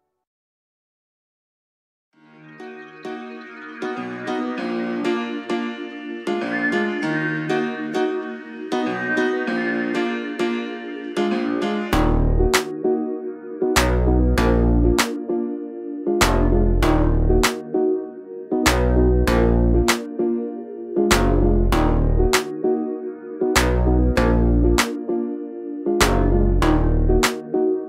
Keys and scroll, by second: 0.4 Up, 1.1 space, 9.4 p, 10.6 space, 11.7 m, 12.5 Right, 15.0-17.1 typing, 17.2 Escape, 20.7 r, 27.6 space.